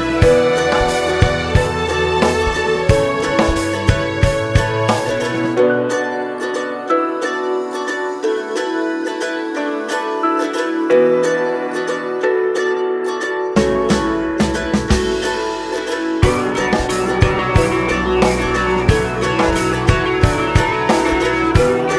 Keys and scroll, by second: 14.0 Down, 14.6 Down, 21.2 ctrl+t.